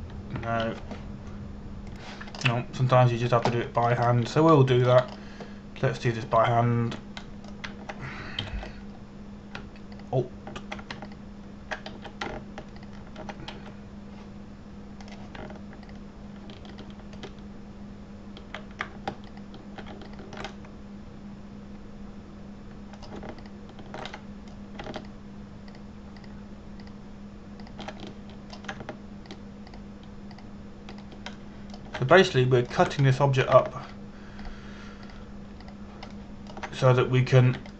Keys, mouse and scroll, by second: 1.0 click, 2.2 ctrl+z, 3.6 click, 4.0-4.8 scroll up 1, 4.8 a, 5.6 middle click, 5.8 scroll up 1, 6.2 shift+middle click, 6.7 scroll up 1, 7.6 click, 8.0 a, 8.9 middle click, 10.1 ctrl+KP_1, 11.6 alt+right click, 12.7 alt+right click, 13.6 a, 14.5 alt+right click, 15.2 a, 16.7 click, 18.4 alt+shift+right click, 20.9 alt+shift+right click, 21.8 alt+shift+right click, 22.2 middle click, 25.1 alt+shift+right click, 25.8 middle click, 26.7 alt+shift+right click, 27.4 alt+shift+right click, 27.8 alt+shift+right click, 28.5 alt+shift+right click, 29.3 alt+shift+right click, 29.7 shift+middle click, 33.0 alt+shift+middle click, 33.8 shift+middle click, 35.6 alt+shift+right click, 36.1 alt+shift+right click, 36.8 alt+shift+right click, 37.3 alt+shift+right click.